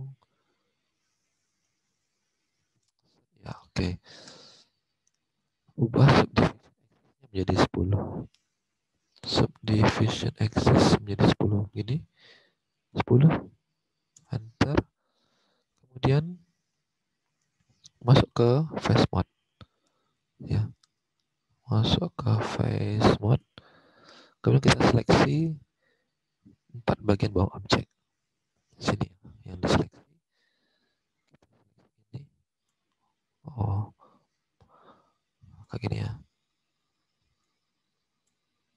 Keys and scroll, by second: 3.3 alt+Tab, 7.9 alt+Tab, 12.5-13.3 typing, 14.0 Return, 14.7 alt+Tab, 20.2 alt+Tab, 23.8 alt+Tab, 30.0 alt+Tab.